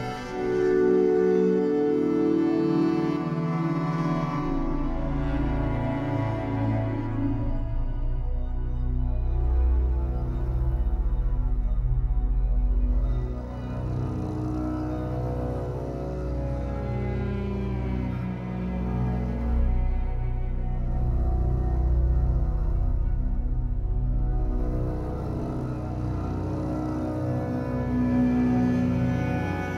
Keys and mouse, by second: 0.1 click, 1.9-3.0 drag, 3.3-4.3 drag, 4.4-4.8 typing, 6.0 click, 7.8 ctrl+s, 7.8 typing, 9.8-10.5 ctrl+alt+drag, 10.5 typing, 10.9 ctrl+alt+click, 13.4 alt+click, 14.5 click, 15.0 alt+click, 15.8-16.5 typing, 15.9 shift+click, 16.3 alt+click, 17.6-17.9 typing, 19.0 click, 19.9-20.3 typing, 21.1 click, 21.5-22.2 typing, 22.2-25.2 alt+drag, 25.4 typing, 27.8-29.7 alt+drag.